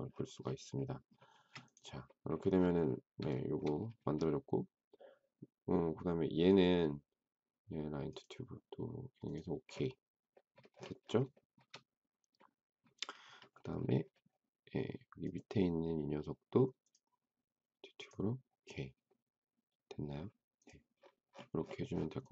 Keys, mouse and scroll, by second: 1.3 space, 3.3 shift+middle click, 11.3 shift+middle click.